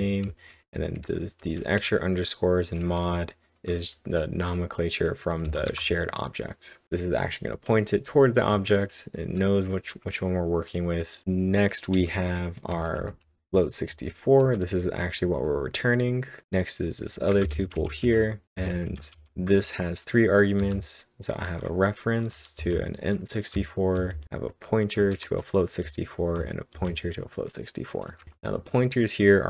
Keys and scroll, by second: 0.0-0.5 typing, 2.7-3.6 typing, 11.0-12.0 typing, 13.7-15.2 typing, 17.3 shift+Num_Lock, 17.3-19.2 typing, 20.6 typing, 22.6-26.7 typing, 28.1 typing.